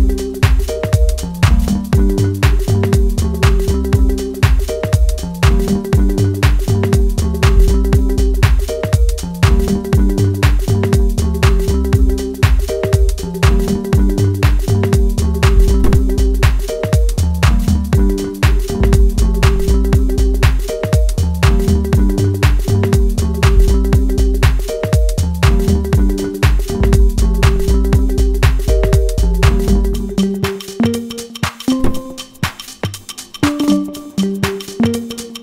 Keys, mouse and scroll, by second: 11.4-13.0 middle drag, 13.0-14.8 drag, 14.8-16.2 middle drag, 16.2-21.6 drag, 21.6-23.1 middle drag, 23.1-29.2 drag, 29.2 ctrl+z, 30.1-32.8 drag, 32.8-35.4 middle drag.